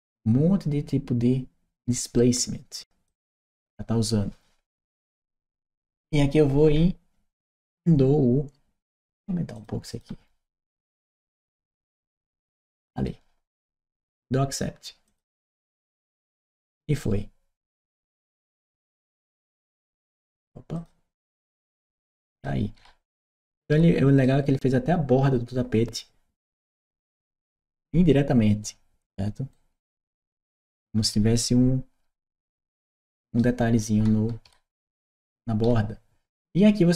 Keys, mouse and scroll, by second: 2.8 click, 9.3 click, 9.7 click, 11.5 BackSpace, 14.9 click, 17.5 click, 19.4 click, 20.5 click, 21.2 click, 21.7-24.0 right drag, 22.2 w, 23.5 s, 26.7-30.5 right drag, 27.1 w, 30.0 s, 32.3 right click, 33.6-36.7 right drag, 33.7 d, 34.7 w.